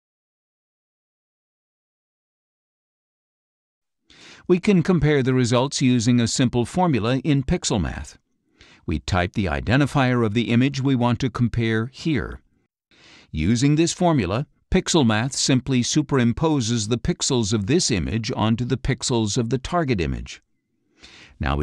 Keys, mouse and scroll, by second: 0.9 click, 2.0 click, 8.5 click, 9.1-11.2 typing, 12.8-14.0 drag, 19.8 click.